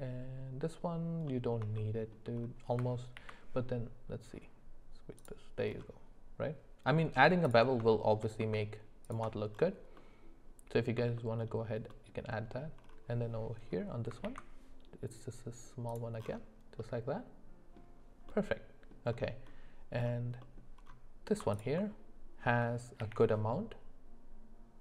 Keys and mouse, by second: 1.3 middle click, 1.8 shift+middle click, 3.2 ctrl+b, 7.9 shift+middle click, 9.0 alt+shift+click, 10.0 middle click, 11.2 shift+middle click, 11.9 middle click, 12.4 middle click, 14.2 ctrl+b, 16.8 middle click, 18.3 middle click, 20.4 middle click, 23.0 ctrl+b.